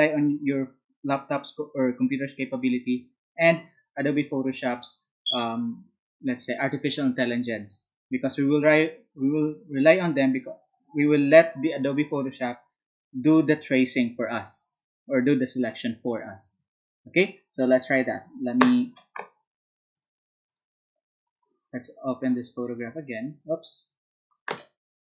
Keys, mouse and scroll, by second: 19.9 alt+click, 20.4 alt+click, 22.2 alt+click, 22.8 alt+click.